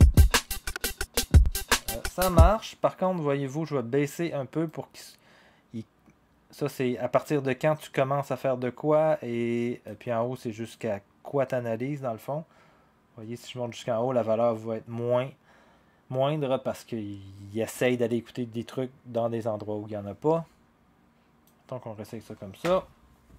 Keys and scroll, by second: 2.3 0, 22.6 0.